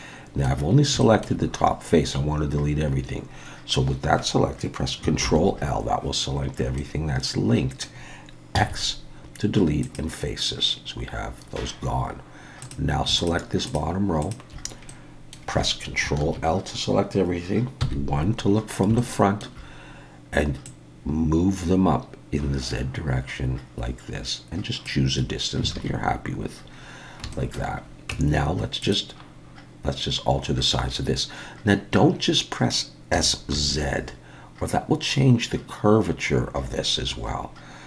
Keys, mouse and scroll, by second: 0.7 scroll up 2, 1.0 shift+middle click, 5.2 ctrl+l, 6.3-8.3 scroll down 3, 6.8 middle click, 8.6 x, 12.6 click, 13.2 shift+click, 13.7 shift+click, 14.2 shift+click, 14.9 middle click, 16.2 ctrl+l, 17.8 KP_1, 18.6-19.0 scroll up 3, 19.0 shift+middle click, 20.6 click, 25.7 alt+a, 26.7-27.3 scroll down 3, 27.3 shift+middle click, 28.1 Tab, 28.8 click, 33.1 s.